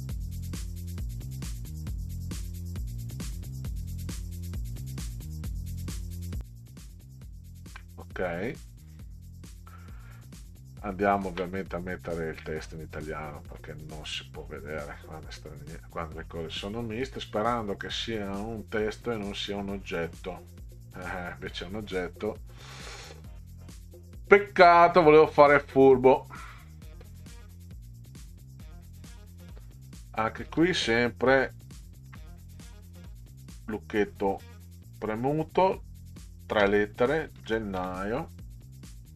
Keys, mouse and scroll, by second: 0.3 click, 0.8 middle click, 0.9 click, 2.0 middle click, 2.1 click, 2.2 middle click, 2.7 click, 3.2 click, 3.4 click, 3.5 middle click, 4.7 click, 5.1 middle click, 5.2-5.7 drag, 5.8 middle click, 6.0 click, 6.2 ctrl+click, 8.6 click, 11.1 ctrl+scroll up 2, 13.6-13.9 middle drag, 14.7 click, 25.5 click, 27.5 click, 32.1 Caps_Lock, 36.6 g, 37.4 e, 37.8 n, 39.0-39.1 drag.